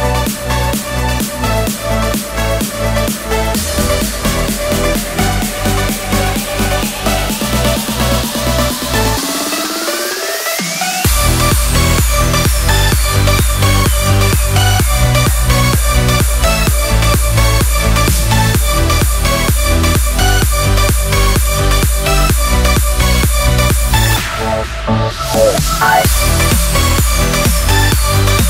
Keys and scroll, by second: 4.3 super+d, 5.6 super+z, 12.0 Escape.